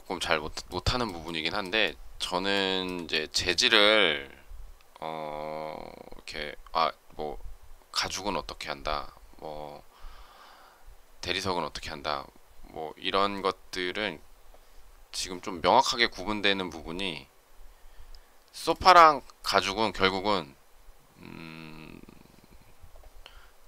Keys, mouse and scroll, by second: 2.5 shift+middle click.